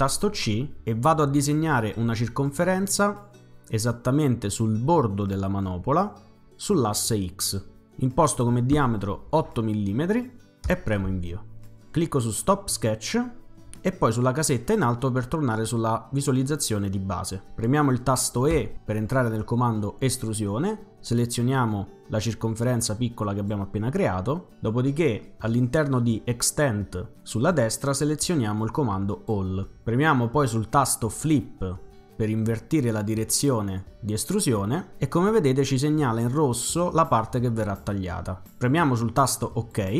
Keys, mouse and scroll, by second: 9.3 8, 10.7 Return, 12.2 click, 14.5 click, 18.5 e, 23.4 click, 27.4 click, 29.1 click, 31.3 click, 39.5 click.